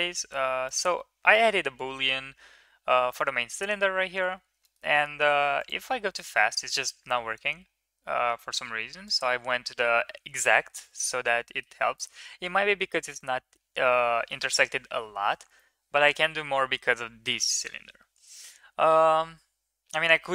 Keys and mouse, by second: 4.6 middle click, 11.4 middle click, 12.0-12.4 middle drag, 15.5-16.0 middle drag.